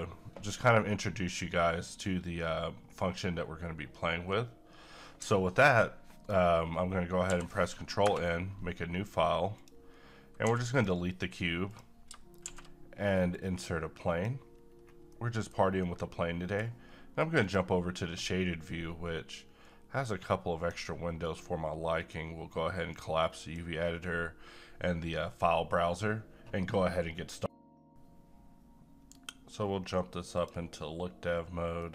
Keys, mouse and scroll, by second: 4.2-5.2 scroll up 1, 5.2-5.7 scroll down 1, 7.3 ctrl+n, 8.0 Return, 9.5 click, 10.4 x, 10.7 click, 12.4 shift+a, 13.3 click, 14.6 scroll up 1, 15.1 middle click, 15.6 scroll down 1, 15.8-17.4 middle drag, 18.3-27.4 drag, 31.7 scroll up 1, 31.8 middle click.